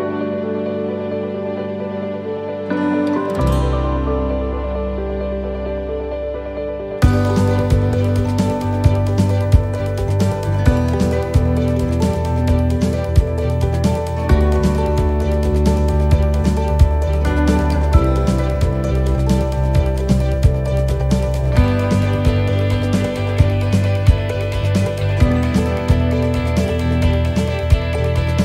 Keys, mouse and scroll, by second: 0.3 click, 1.9 right click, 2.6 middle click, 3.6 g, 5.1 middle click, 5.4 scroll up 4, 5.9 middle click, 10.9 ctrl+z, 13.6 ctrl+z, 14.7 ctrl+z, 15.3 ctrl+z, 15.7 ctrl+z, 16.1 ctrl+z, 18.2 ctrl+z, 21.8 ctrl+z, 25.9 ctrl+z, 27.8 click.